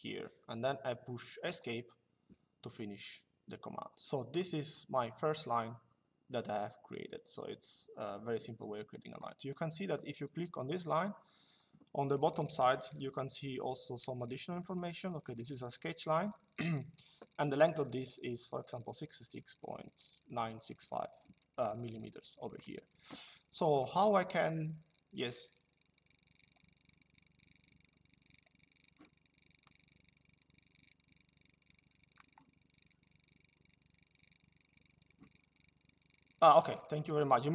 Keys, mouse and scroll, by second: 1.2 Escape, 4.0 click, 7.7 click, 9.6 click, 22.3 click, 23.5 click, 29.3 click, 36.5 click.